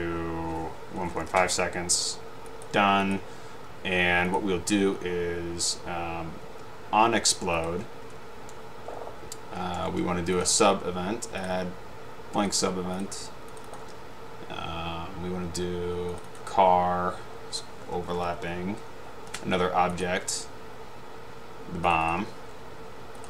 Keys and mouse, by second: 0.9-1.8 typing, 4.4-4.8 drag, 7.7-8.3 drag, 11.5 click, 13.7 click, 16.3 click, 18.0-18.8 typing, 22.0 click.